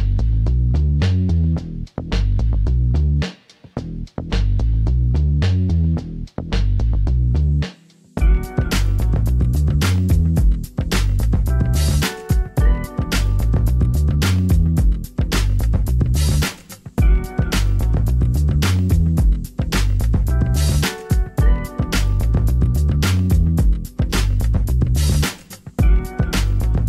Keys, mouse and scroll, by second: 9.9 z, 18.4 z, 19.7 Tab, 21.0 Tab, 21.8 Tab, 25.6 s.